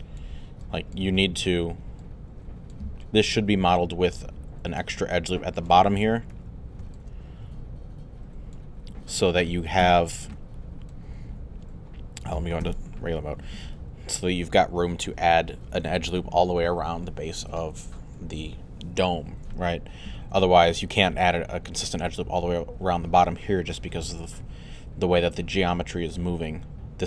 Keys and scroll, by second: 9.8 3, 12.6 1, 13.6 alt+1.